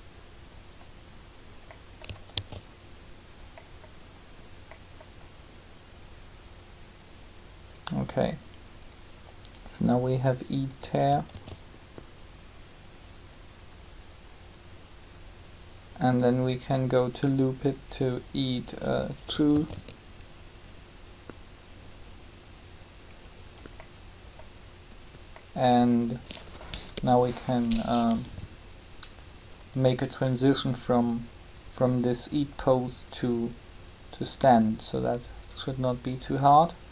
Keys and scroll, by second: 2.2 alt+a, 11.2 alt+a, 19.3 alt+a, 26.6 3.